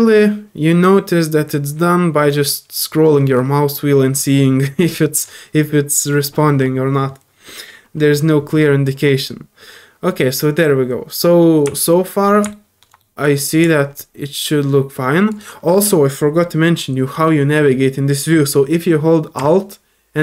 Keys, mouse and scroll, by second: 2.2 scroll up 2, 2.4 scroll down 4, 2.7 scroll up 2, 3.0 scroll down 2, 3.2 scroll up 2, 3.9-4.2 scroll up 3, 5.2 scroll down 1, 5.4 scroll up 1, 8.8 scroll up 1, 11.8 alt+middle click, 12.5 middle click, 13.0 middle click, 13.9-15.3 drag.